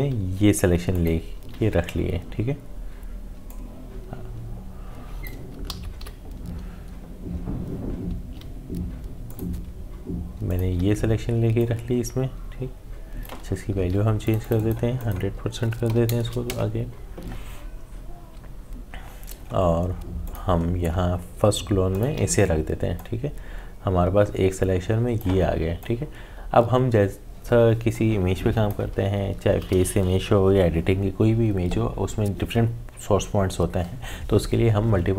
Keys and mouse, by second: 0.9 alt+click, 3.5-5.7 drag, 5.7 ctrl+z, 6.0 s, 9.2-13.7 drag, 13.7 ctrl+z, 14.2 click, 20.2 click, 22.0-31.1 alt+drag.